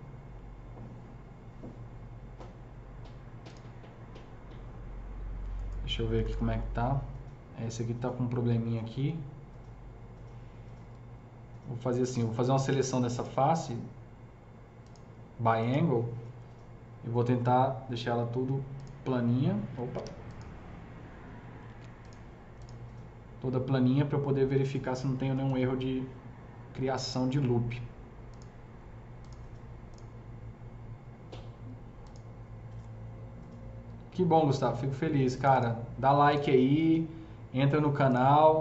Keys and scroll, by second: 5.9 F3, 6.1 F3, 6.3 F4, 10.9 F3, 19.9 ctrl+z, 21.7 ctrl+z, 25.0 F3, 25.2 typing.